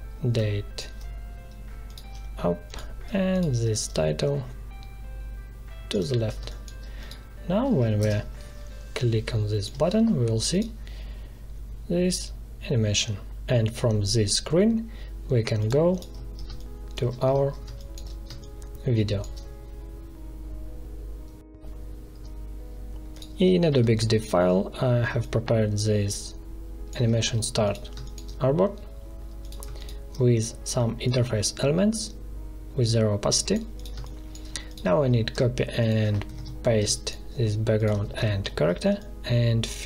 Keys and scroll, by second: 6.4 space, 8.0 ctrl+Return, 16.4 space, 23.7 space, 27.8 space, 33.9 space, 36.2 ctrl+c, 36.7 space, 38.0 ctrl+v.